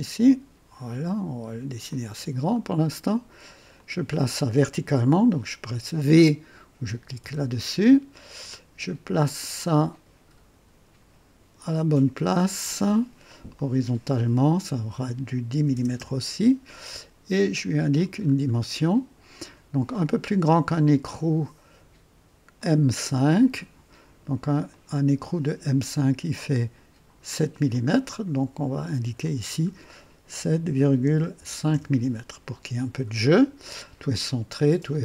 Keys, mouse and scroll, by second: 1.8 click, 2.5 right click, 3.7 click, 7.2 v, 9.2-10.7 drag, 11.5 click, 13.5 click, 15.5 KP_1, 15.7 KP_0, 15.9 Return, 18.2-18.5 scroll up 1, 18.9-19.5 right drag, 22.5 click, 24.7-25.8 drag, 27.7 click, 29.2 click, 30.4 KP_7, 31.0 KP_Decimal, 31.3 KP_5, 31.7 KP_Enter.